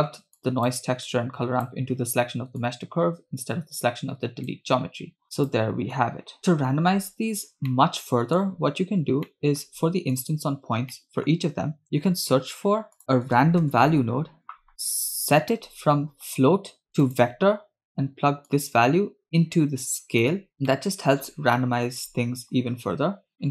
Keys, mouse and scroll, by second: 0.4 click, 1.1-1.7 drag, 2.6 click, 2.8-4.6 drag, 5.2 click, 6.0 click, 7.9 middle click, 9.4-9.8 middle drag, 10.2 drag, 10.8 scroll down 1, 11.0 middle click, 12.1 shift+a, 16.0-16.8 scroll up 1, 16.9 click, 18.6 click, 18.9-20.5 drag, 20.8 shift+middle click, 21.7 middle click, 22.1-22.9 scroll up 2, 23.3 scroll down 2.